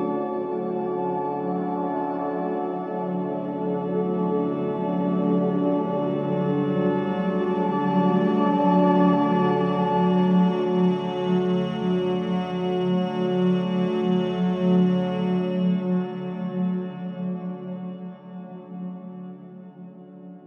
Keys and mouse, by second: 0.3 typing, 2.5 typing, 5.1-7.0 drag, 6.7-8.0 typing, 9.7 space, 10.5 click, 11.0 typing, 13.5 typing, 15.5 ctrl+s, 17.5 click.